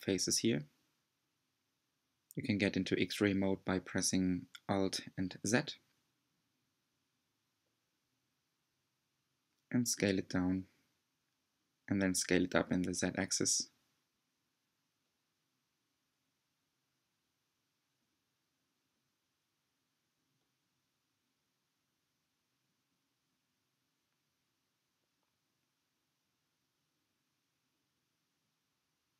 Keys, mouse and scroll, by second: 2.1 s, 4.5 Tab, 5.7 s, 15.3 s, 19.5 click, 23.6 alt+z, 26.6 alt+z, 29.0 click.